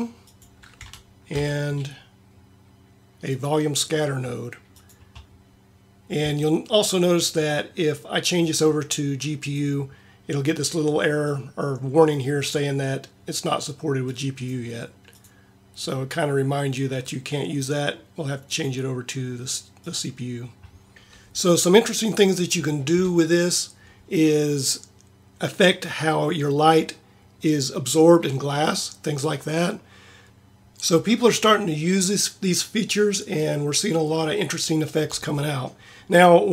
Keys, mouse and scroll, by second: 1.3 shift+a, 20.3-23.3 middle drag.